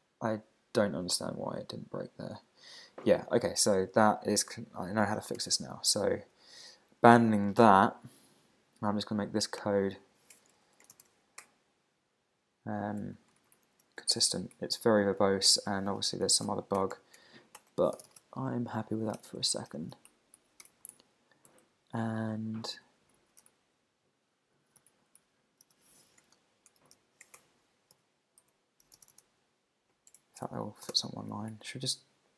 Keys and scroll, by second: 5.5 super+Tab, 10.0 Right, 11.4 Return, 13.4 Up, 13.6 super+Right, 14.5 Down, 15.2 Up, 15.5 Return, 17.6 Return, 20.1 alt+shift+Right, 20.4 alt+shift+Left, 20.9 super+Right, 21.6 Left, 23.2 alt+Right, 23.5 alt+shift+Left, 24.8 super+c, 24.9 super+Right, 25.2 Left, 27.4 Return, 27.9 super+v, 28.4 super+Left, 30.1 super+BackSpace, 31.5 alt+Right.